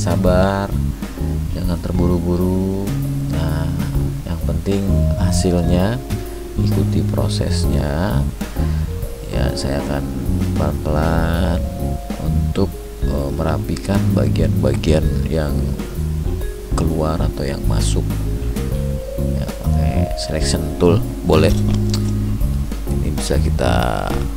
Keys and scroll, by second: 17.1 ctrl+alt+z.